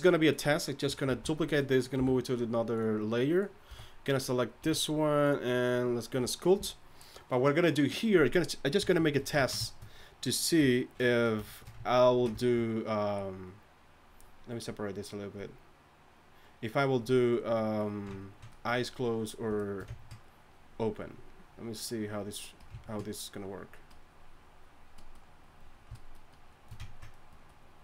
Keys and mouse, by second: 1.1 shift+d, 2.0 m, 3.7 a, 4.6 a, 10.6 KP_1, 18.5-22.8 drag.